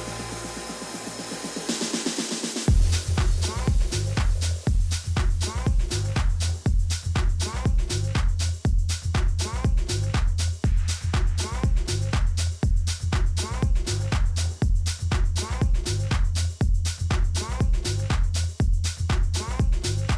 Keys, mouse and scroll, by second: 1.4 a, 2.7 a, 3.0 a, 6.5 ctrl+r, 14.6 a, 17.7 ctrl+z, 18.2 ctrl+z, 19.1-20.1 typing.